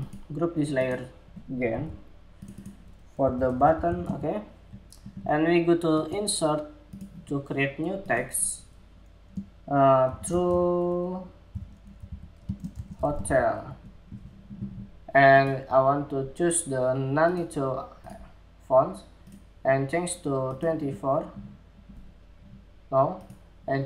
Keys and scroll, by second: 1.3 super+g, 13.9 Escape.